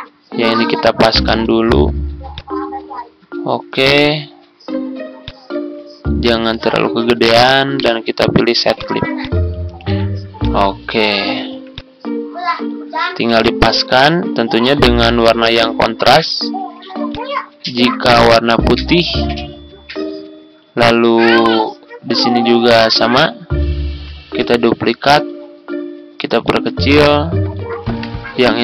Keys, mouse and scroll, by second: 0.8 shift+scroll up 1, 1.6 ctrl+scroll down 1, 2.3-7.3 drag, 7.7 right click, 8.7 click, 9.7 ctrl+scroll down 1, 10.3 click, 11.1 ctrl+scroll down 1, 11.6-15.4 drag, 17.4 ctrl+click, 18.0-22.4 drag, 23.8 ctrl+d, 24.3 click, 26.4-27.5 ctrl+drag, 28.3 click.